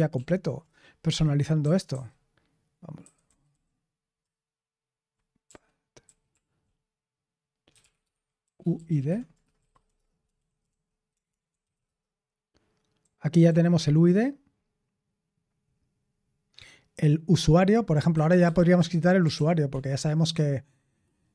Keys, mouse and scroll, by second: 0.1 ctrl+p, 0.6 Return, 1.5-3.9 typing, 5.4-6.2 typing, 7.4-13.4 typing, 18.1-18.4 typing, 19.3 ctrl+p, 19.6 ctrl+p.